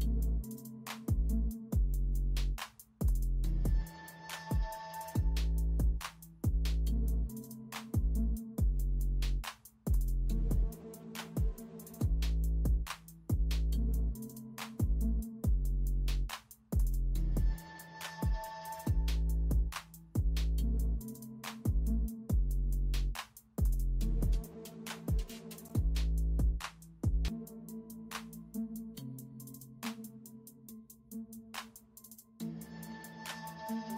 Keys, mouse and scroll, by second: 1.1-3.5 typing, 5.7-7.3 typing, 8.5 space, 9.3 space, 9.8 space, 11.0 space, 11.5 space, 11.7 space, 12.7-14.0 typing, 15.1 typing, 17.4 ctrl+alt+z, 19.4 alt+z, 21.3 typing, 22.8-23.7 typing, 25.4 ctrl+alt+z, 25.7 space, 28.2 ctrl+], 30.6 space, 32.3 space, 33.2 space.